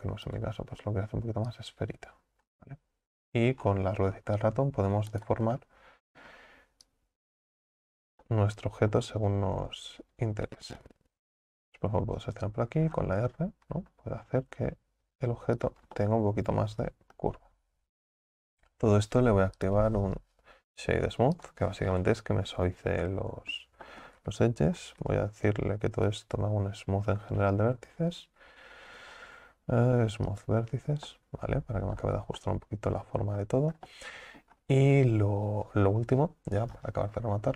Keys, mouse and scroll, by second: 5.6-6.9 middle drag, 6.9-8.3 drag, 8.3-9.9 middle drag, 9.9 KP_3, 11.4 right click, 16.0 middle click, 16.6-17.0 scroll down 1, 17.2-19.6 middle drag, 19.6-22.0 drag, 22.0-24.3 middle drag, 24.3 Tab, 24.7 scroll up 2, 31.1-32.1 middle drag, 32.1 Tab, 32.4-33.8 middle drag, 33.8 scroll down 1, 33.9-34.6 middle drag, 34.6-37.1 scroll up 1, 37.1-37.5 scroll up 1.